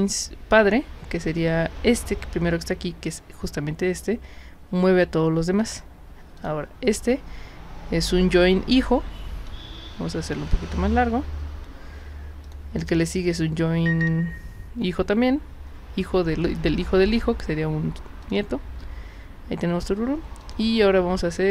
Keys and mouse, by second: 5.6 click, 6.4 click, 12.5 drag, 13.1 click, 18.2 click, 20.4 click.